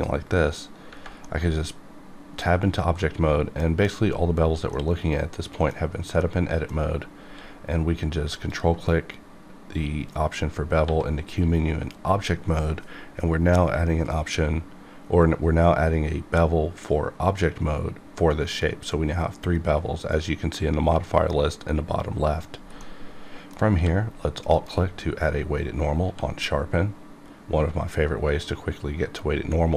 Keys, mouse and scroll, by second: 1.2-4.7 middle drag, 4.7-6.2 middle drag, 6.2 middle click, 7.2 q, 8.5 ctrl+click, 10.8 1, 11.9 1, 22.4 click, 22.8 middle click, 22.9 middle click, 23.7 q, 24.4 alt+click, 26.0 q.